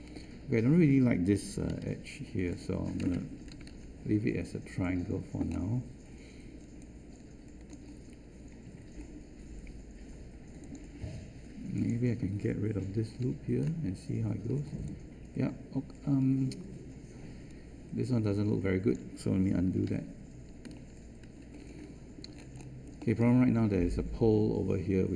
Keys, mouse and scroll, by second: 3.5 ctrl+Delete, 13.2 ctrl+Delete.